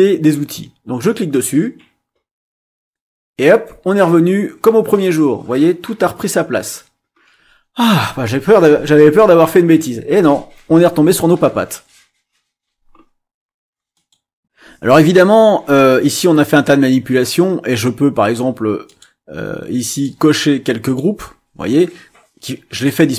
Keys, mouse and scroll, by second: 1.3 click, 13.9 click, 18.8 click, 19.9 click, 20.8 click.